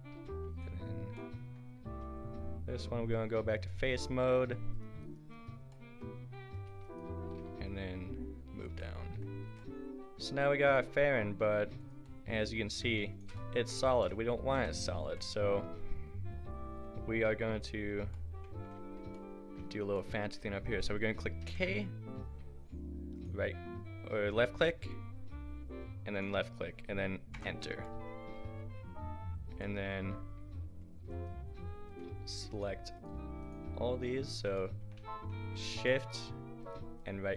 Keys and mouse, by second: 0.1 s, 4.7 middle click, 6.8-8.6 right drag, 7.4 g, 8.6 click, 9.4 Tab, 10.3 a, 11.8-12.7 drag, 12.7 g, 13.9 ctrl+z, 14.5 KP_Decimal, 15.6 Tab, 17.3 a, 21.4 k, 31.1-34.7 drag.